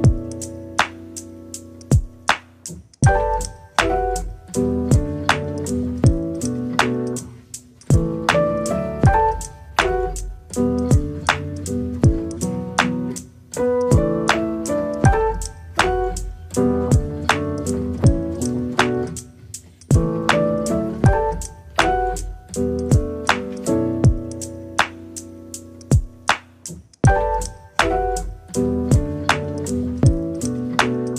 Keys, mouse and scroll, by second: 1.0 ctrl+r, 2.3 click, 3.6 middle click, 4.1 KP_1, 10.0 click, 10.6 click, 12.8 ctrl+click, 15.9 click, 16.6 ctrl+click, 17.7 ctrl+click, 18.6-20.0 scroll up 3, 20.1 scroll down 2, 20.3-21.5 middle drag, 21.9-22.4 scroll up 1, 22.4 click, 22.8 click, 23.4 right click, 24.4 a, 24.8 r, 27.0 g, 30.4 s.